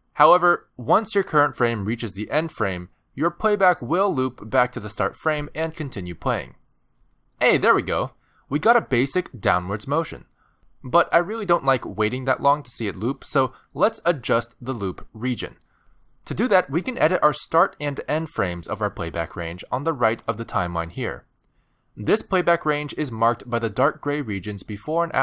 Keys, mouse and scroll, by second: 9.6 space, 11.2 click, 25.0-25.2 scroll down 3.